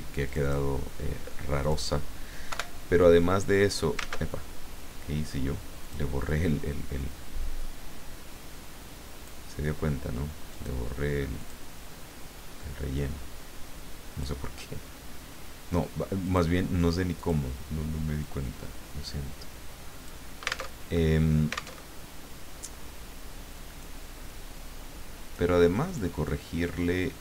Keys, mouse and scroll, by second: 0.3 click, 1.6 click, 2.5 Delete, 4.1 ctrl+z, 5.8 click, 7.0-9.4 drag, 10.5 click, 11.4 click, 12.9-14.4 drag, 16.2 click, 17.2 click, 18.2-20.2 drag, 20.7 alt+Tab, 21.8 alt+Tab, 23.6 click, 24.2-25.5 drag, 25.9 click, 26.2-27.2 drag.